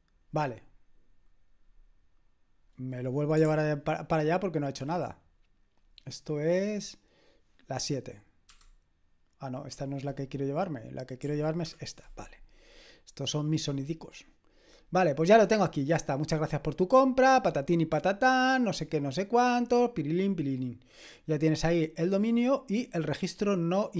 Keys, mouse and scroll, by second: 8.5 super+/, 11.0 click, 11.8 super+/, 13.4-15.7 drag, 17.2-18.0 scroll down 1, 18.8-19.4 scroll down 1, 19.4 scroll down 1, 19.5-21.0 scroll up 1, 21.0 click, 22.6 click.